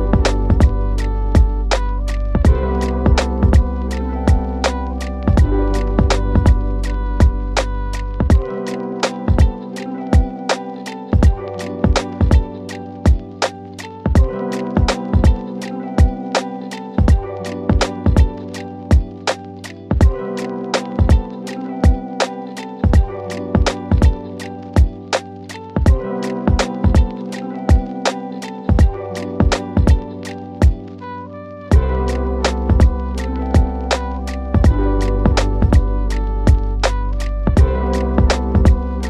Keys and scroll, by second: 6.4 shift+Page_Up, 25.8 shift+Page_Up, 34.1 shift+Page_Up.